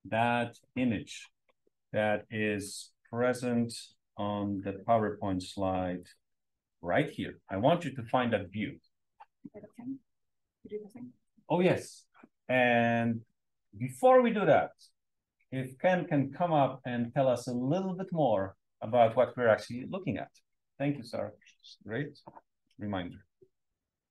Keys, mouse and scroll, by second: 0.0-0.5 scroll up 1.